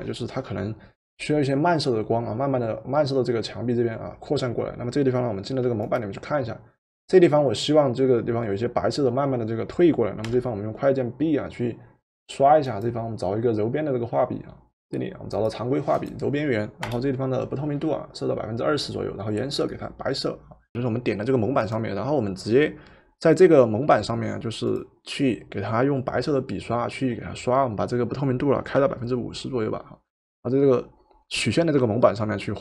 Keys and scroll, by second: 10.2 b, 16.9 Return, 28.9 5.